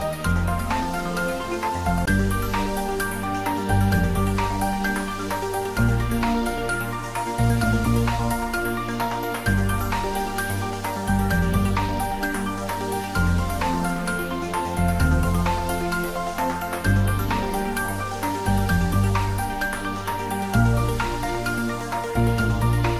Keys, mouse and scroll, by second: 5.2 click, 6.0 s, 6.3 x, 10.2 click, 11.2-11.6 scroll down 1, 12.9-18.3 middle drag, 21.1 click.